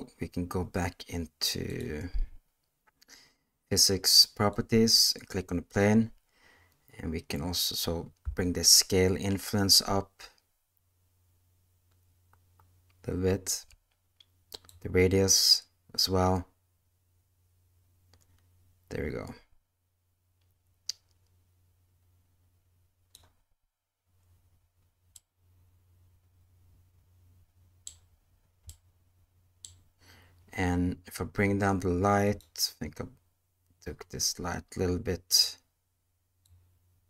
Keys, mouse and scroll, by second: 1.7 click, 4.5-5.7 drag, 8.6-13.5 shift+drag, 14.7-23.1 drag, 25.1-27.8 middle drag, 28.6-29.6 middle drag, 32.2 click, 35.3 click, 36.4-37.0 drag.